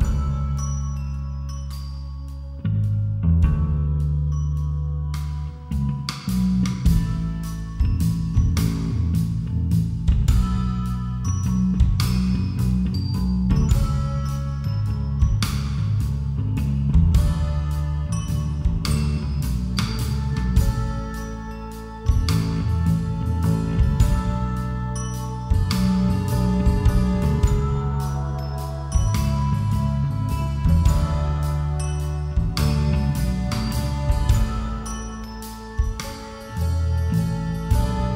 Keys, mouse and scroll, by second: 1.3 a, 2.3 z, 3.1 b, 4.7 g, 6.5 a, 7.3 ctrl+r, 9.2 a, 10.1 z, 13.3 z, 16.0-22.8 right drag, 23.2 x, 24.1 z, 24.7-26.2 middle drag, 28.2 ctrl+r, 30.8 z, 31.3-33.0 middle drag, 33.0 z, 33.5-34.6 middle drag, 34.6 a, 35.3-37.1 right drag, 37.4-38.1 drag.